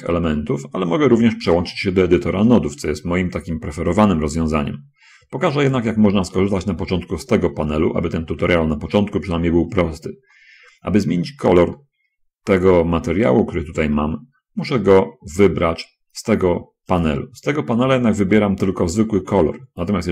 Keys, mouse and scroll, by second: 4.3-6.3 drag, 12.2-15.3 middle drag, 17.3 click.